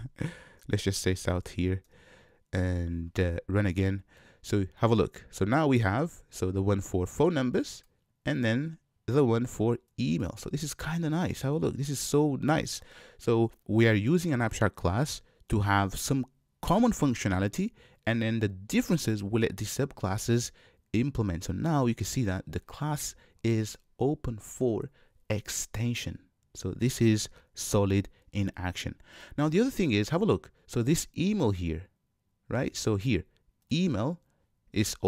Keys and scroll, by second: 0.0 Tab, 1.2 Tab, 1.9 Return, 3.9 shift+F10.